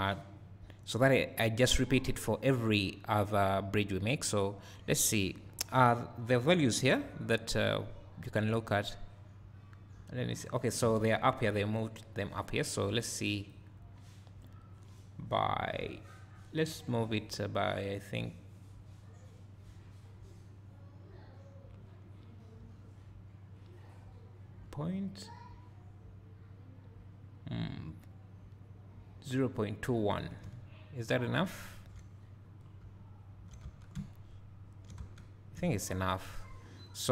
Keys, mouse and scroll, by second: 8.7 click, 11.0 ctrl+z, 13.5 click, 30.4 `, 30.9 click, 31.2-34.1 drag, 32.7 scroll down 2, 32.8 `, 33.7 Tab, 33.9 `, 34.5 click, 35.0 Tab, 35.2 Tab, 35.2 click, 35.5 scroll up 2, 35.8 click, 36.2 click, 36.4-37.1 drag.